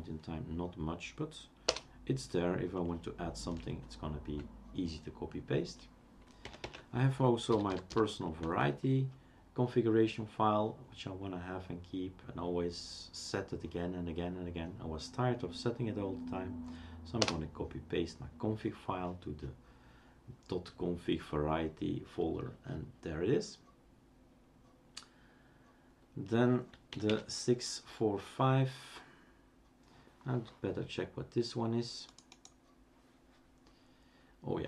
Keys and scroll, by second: 1.7 Return, 6.6-8.4 typing, 9.6 typing, 17.2 Return, 27.1 typing.